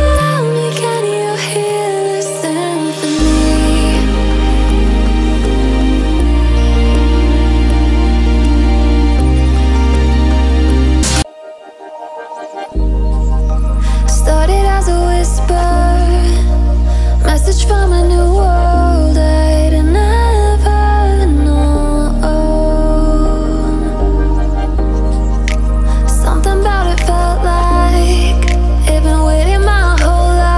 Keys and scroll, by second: 12.4 ctrl+z, 12.7 ctrl+z.